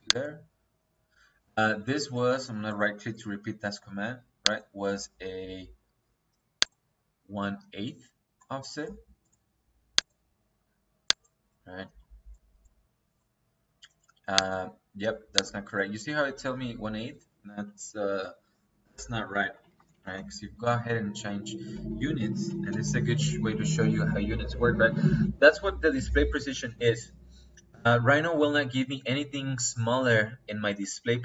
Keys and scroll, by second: 17.2 Escape, 19.0 Escape, 19.5 u, 19.8 n, 20.0 t, 20.1 space, 21.6 Escape, 22.2 u, 22.5 n, 22.6 t, 22.8 space.